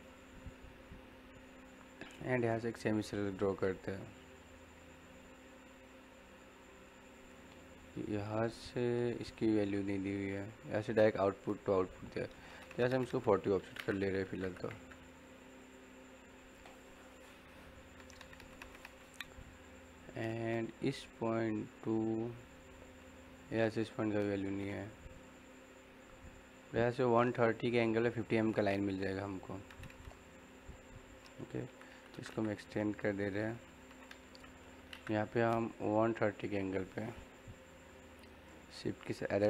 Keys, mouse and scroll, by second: 0.0-1.6 middle drag, 1.6 scroll up 1, 1.8-4.6 middle drag, 1.8 typing, 13.5 o, 13.8 space, 15.5 click, 17.1-22.1 middle drag, 17.1 typing, 28.4-31.3 middle drag, 31.6-32.1 typing, 33.2 click, 33.5 scroll down 1, 33.5 typing, 33.6 middle click, 34.6 l, 34.8 space, 35.6 click, 36.4-38.2 scroll up 1, 38.5-38.9 typing, 38.8 shift+Num_Lock, 38.8 scroll up 1.